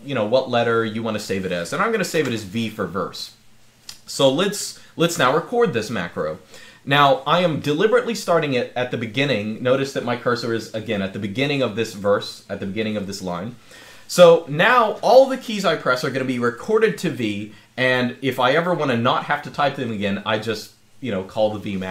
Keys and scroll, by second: 1.9 v.